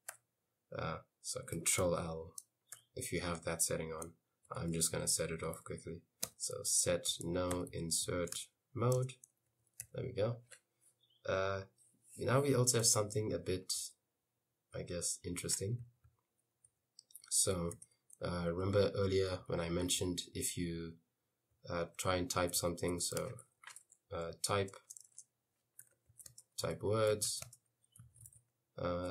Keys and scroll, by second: 0.1 u, 1.9 ctrl+l, 2.8 u, 4.7-9.9 typing, 9.0 Return, 13.5-16.7 typing, 17.8-29.0 typing.